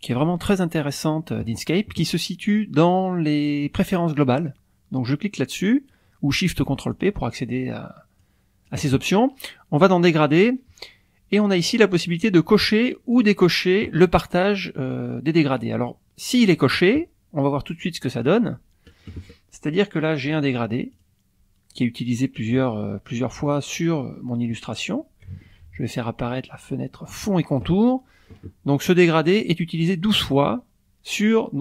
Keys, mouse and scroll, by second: 6.9 click, 8.2-8.9 drag, 10.0 click, 11.6 click, 12.6 click, 13.1 click, 18.2 click, 18.5 click, 19.0 middle click, 20.3 click, 20.9 click, 23.1 click, 27.1 click.